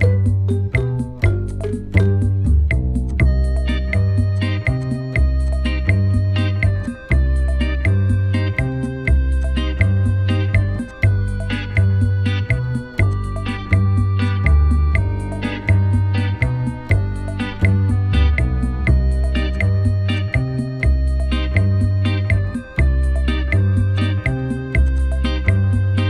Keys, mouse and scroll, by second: 0.0-0.2 typing, 0.4 Return, 2.0 Delete, 5.1 right click, 8.5 alt+scroll down 1, 14.5 alt+scroll down 2, 19.6 alt+scroll up 1, 23.0 alt+scroll down 1, 24.4 ctrl+j, 24.9 double click, 25.4-25.8 typing, 25.9 Return.